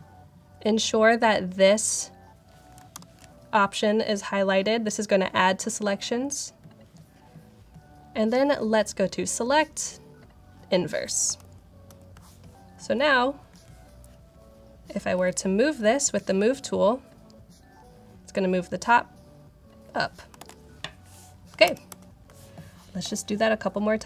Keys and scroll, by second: 2.8 alt+super+9, 11.3 super+-, 11.8 super+-, 15.0 v, 20.3 super+d, 21.5 super+=, 21.8 super+=.